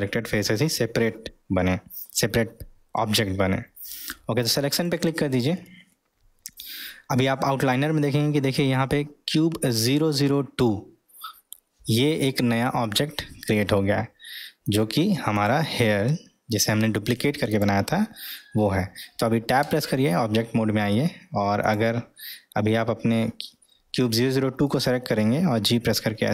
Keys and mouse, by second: 14.6 click, 15.3 click, 16.8 middle click, 17.5 click, 19.7 Tab, 21.6 click, 25.6 g.